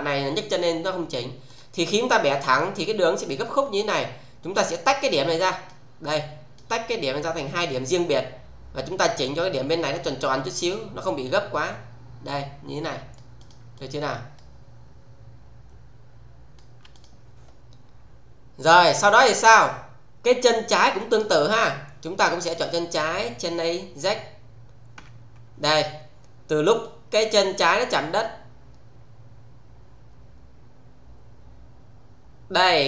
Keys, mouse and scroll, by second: 1.4 click, 5.0 click, 7.5 click, 9.1 click, 9.8-13.3 middle click, 13.3 click, 14.3-16.8 shift+middle click, 16.8 click, 20.9 click, 22.6 click, 25.0 f, 26.8-32.8 click.